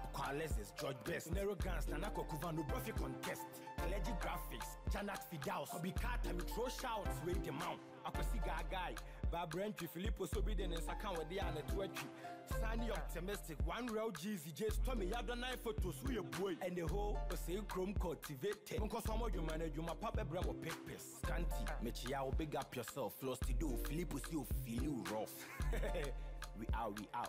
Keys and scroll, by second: 6.2 ctrl+Delete, 9.2 shift+Right, 10.2 Down, 23.2 ctrl+j.